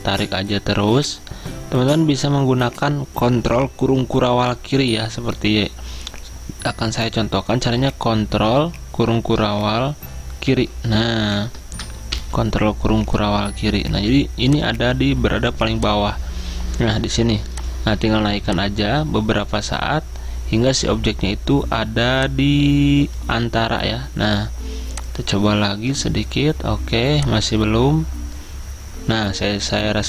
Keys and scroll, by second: 10.6 ctrl+shift+;, 12.2 ctrl+shift+[.